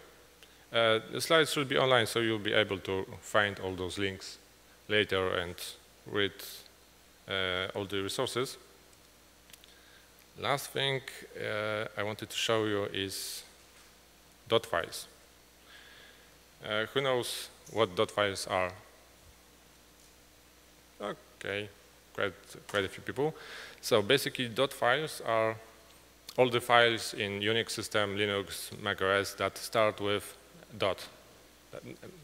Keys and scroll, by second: 7.9 Right.